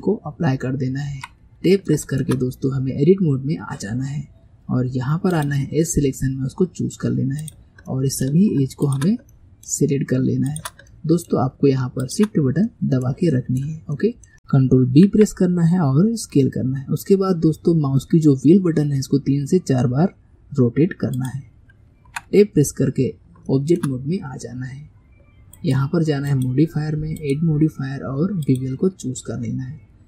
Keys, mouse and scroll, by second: 0.6-1.2 scroll up 2, 1.2 Tab, 1.8 shift+scroll up 1, 1.9-5.0 shift+middle drag, 5.4 click, 6.3-7.4 scroll up 1, 7.4 click, 7.9-8.9 middle drag, 8.9 shift+click, 9.4-10.5 middle drag, 10.5 shift+click, 10.9-12.1 middle drag, 12.1 shift+click, 12.7-14.3 middle drag, 14.9 ctrl+b, 22.1 Tab, 23.5-25.6 shift+middle drag, 25.6 click, 27.2 click, 28.6-30.0 drag.